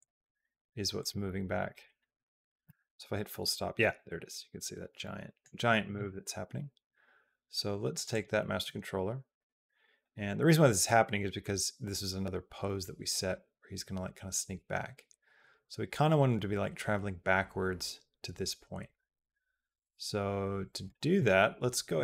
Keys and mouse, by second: 0.8 click, 1.3 click, 1.5 click, 4.8 middle click, 4.8 KP_Decimal, 5.6 middle click, 5.8-7.8 drag, 7.9 click, 9.2 click, 10.7-20.7 drag.